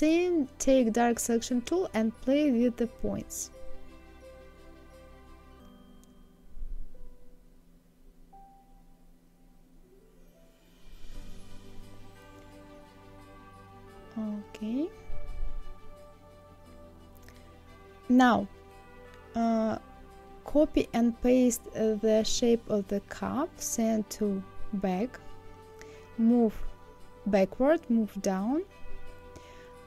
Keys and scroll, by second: 20.5 ctrl+c, 21.1 ctrl+f, 24.5 Down.